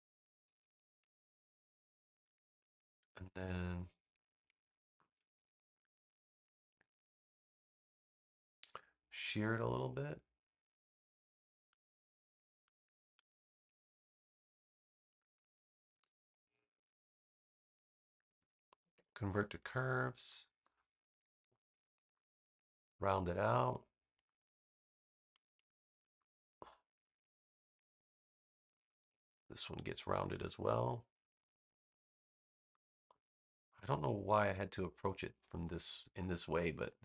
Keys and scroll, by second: 5.2 v, 15.8 v, 18.8 super+Return.